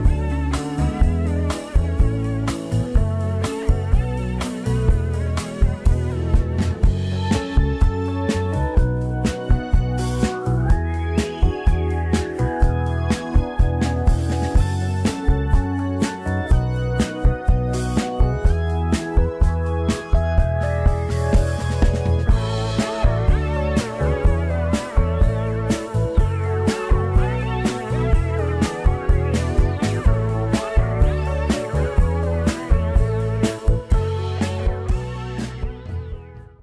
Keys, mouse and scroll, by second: 0.0-1.1 shift+middle drag, 1.1 KP_1, 2.7 click, 3.3 drag, 4.2-5.9 drag, 7.1-9.1 drag, 9.1 middle drag, 9.3-9.7 scroll up 3, 9.7-10.3 middle drag, 10.3 scroll up 1, 10.5 Tab, 10.7 middle click, 11.3 1, 11.5 click, 12.3 KP_Decimal, 12.9-13.3 scroll down 12, 13.3-14.3 middle drag, 14.3 scroll down 3, 14.5 middle click, 15.2-15.9 scroll down 14, 15.9 scroll up 1, 15.9 middle click, 16.4 a, 16.8 a, 17.4 alt+n, 18.9 Tab, 19.3-19.9 right drag, 19.9 scroll down 1, 20.0-20.4 middle drag, 20.4 scroll up 3, 20.6 scroll down 3, 20.8-22.5 middle drag, 22.5 click, 22.6 scroll down 2, 22.8 Tab, 23.2 scroll down 1, 23.4 3, 24.1 Tab, 24.3-26.5 right drag, 26.5 click, 27.7 drag, 27.9-29.2 scroll up 2, 29.2 click, 30.8 ctrl+a, 32.9 alt+a, 33.1 scroll down 2, 33.2-34.2 middle drag, 34.2-35.0 scroll up 4, 35.0 scroll down 3, 35.2-36.6 middle drag.